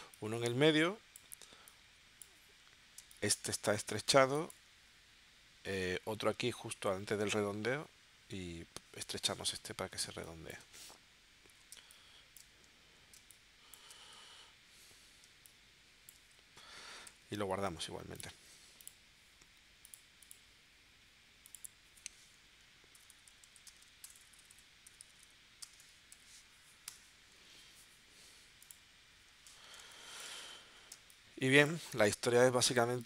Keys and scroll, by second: 3.0 space, 4.1 space, 10.2 space, 11.8 space, 13.2 space, 14.1 v, 15.2 space, 17.1 v, 22.7-25.8 typing, 26.8 Return, 29.8 space, 30.9 space.